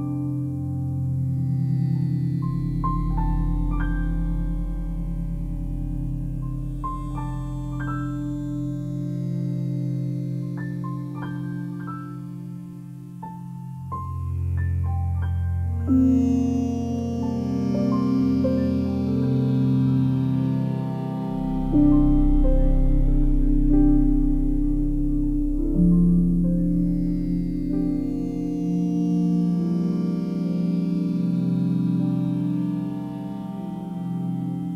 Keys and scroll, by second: 12.2 Delete, 26.9 f, 27.6 F3, 34.3 F3.